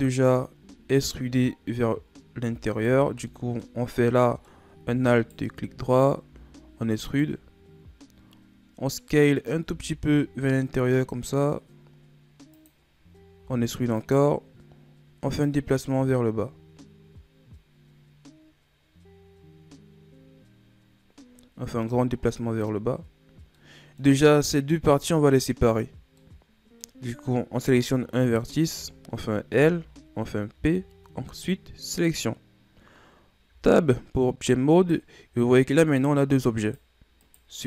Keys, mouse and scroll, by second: 2.7 right click, 3.2 middle click, 3.7-4.1 scroll up 2, 4.1 middle click, 5.1-6.2 alt+right drag, 6.2 e, 9.6 s, 13.3 e, 15.4-18.5 drag, 23.0-23.5 scroll down 2, 23.5-27.0 middle drag, 27.0-28.1 scroll up 1, 28.1 right click, 29.5 l, 30.5 p, 33.4 Tab, 34.7-37.3 right drag.